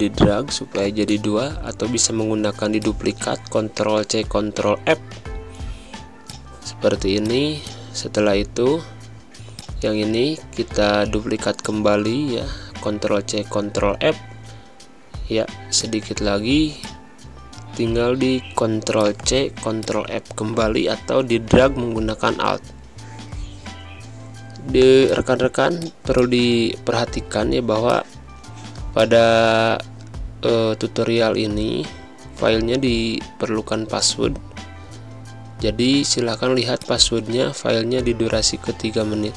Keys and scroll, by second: 4.6 Down, 7.0 space, 9.6 ctrl+c, 13.9 Left, 14.5 Right, 14.7 Up, 16.6 space, 22.4 Down, 22.8 Up, 25.6 space, 26.9 v, 32.2 v, 33.3 v, 34.1 Down, 34.4 Right, 34.8 Up, 36.9 Down, 37.9 Right, 38.5 Down, 38.9 Right.